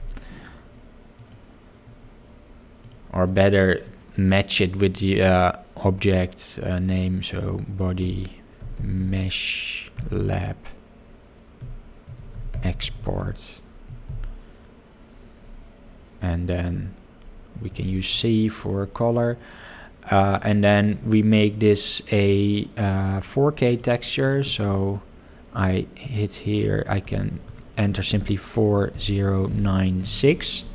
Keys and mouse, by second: 27.1 BackSpace, 27.3 BackSpace.